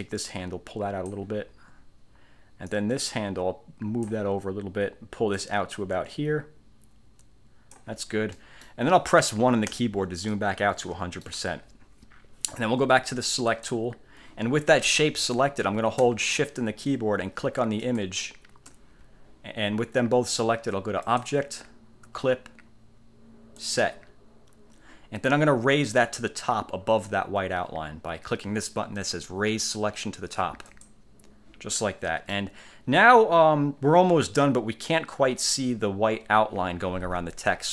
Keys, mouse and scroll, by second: 2.9-4.4 drag, 5.5-8.1 drag, 8.5 click, 8.5 right click, 9.9 1, 10.5-11.6 drag, 13.6 click, 17.9 shift+click, 21.2 click, 23.7 click, 30.8 click, 31.9-32.6 middle drag.